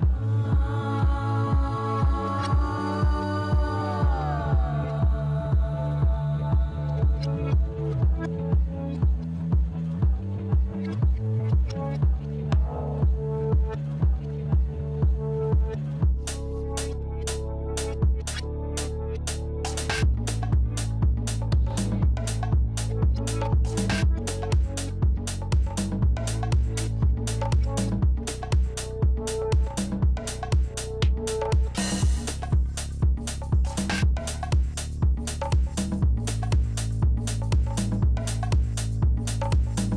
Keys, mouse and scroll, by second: 2.1 click, 5.9 click, 6.9 click, 13.2 click, 14.5 click, 17.3 ctrl+a, 19.5 ctrl+c, 20.9 click, 22.7 ctrl+v, 27.9 ctrl+t, 30.5 click, 33.1 click, 35.0 click, 38.2 shift+click, 39.4 click.